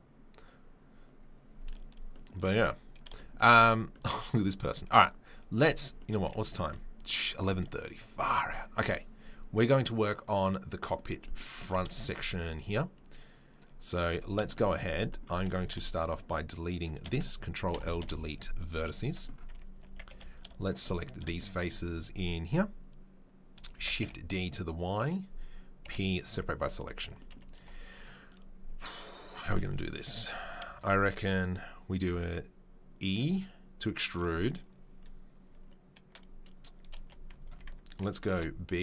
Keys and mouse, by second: 0.0-13.4 middle drag, 5.5 click, 7.0 ctrl+s, 11.6 Tab, 12.3 Tab, 13.4-14.4 drag, 14.4-15.9 shift+middle drag, 15.9 shift+click, 16.0-21.6 shift+middle drag, 18.0 Delete, 19.5 Tab, 19.8 Tab, 20.1 3, 23.7 shift+d, 25.8 p, 26.6 Tab, 27.0 Tab, 27.6-30.4 middle drag, 27.6 2, 30.2 3, 30.4 right click, 30.6-38.8 shift+middle drag, 32.0 e, 38.3 ctrl+b.